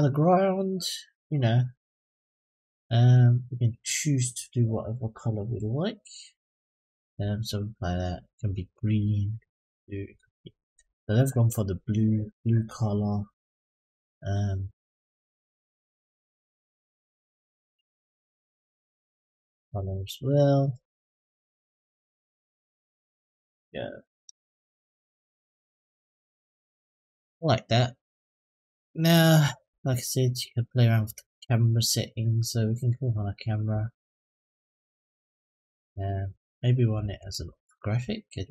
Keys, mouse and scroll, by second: 2.8 click, 6.8 click, 25.5 click, 27.6-28.3 shift+middle drag, 32.8 click, 34.6 middle click, 36.2-37.1 drag, 38.4-38.5 drag.